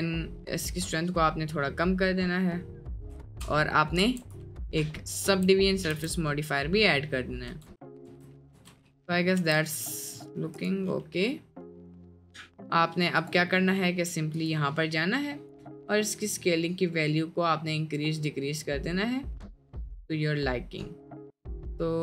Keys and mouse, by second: 0.7-2.9 drag, 4.0 ctrl+1, 5.3 Tab, 5.6 middle click, 6.0 Tab, 6.3-6.8 middle drag, 7.2 middle drag, 7.6 Tab, 8.1 Tab, 8.4 middle click, 8.6 Tab, 9.5 Tab, 9.9-10.2 middle drag, 11.1-11.8 middle drag, 13.3 click, 14.5 click, 15.6-22.0 drag.